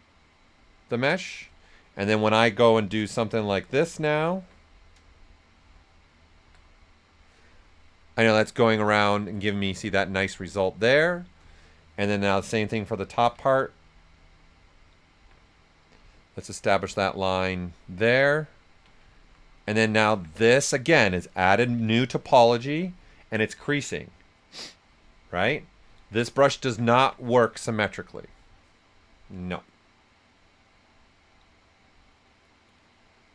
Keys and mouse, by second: 2.8-8.2 ctrl+shift+drag, 8.2 right click, 9.7-11.4 right drag, 12.4-18.5 ctrl+shift+drag, 18.5 ctrl+right click, 21.8-25.0 ctrl+right drag, 25.5 ctrl+right click, 26.8 ctrl+alt+right click, 27.7 alt+right click.